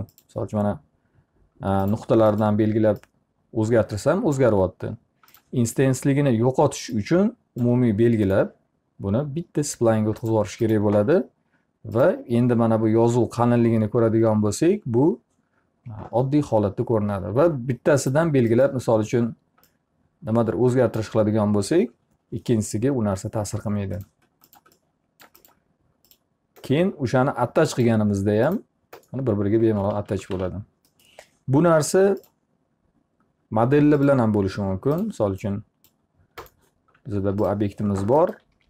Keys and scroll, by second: 29.4 alt+r, 30.0-30.9 typing, 38.1 w.